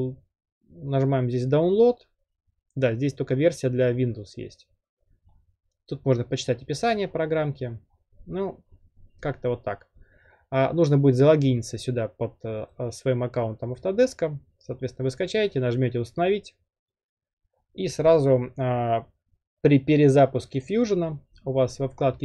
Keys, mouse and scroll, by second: 5.3-6.5 middle drag, 5.3 scroll down 1, 5.4 scroll down 1, 5.4 scroll down 1, 5.6-6.5 scroll down 1, 7.1 middle click, 7.1 scroll down 1, 7.2 scroll down 1, 7.2 scroll down 1, 7.3-8.7 scroll down 10, 8.7-10.3 scroll up 18, 10.7 scroll down 1, 20.7 click, 21.7-22.2 drag.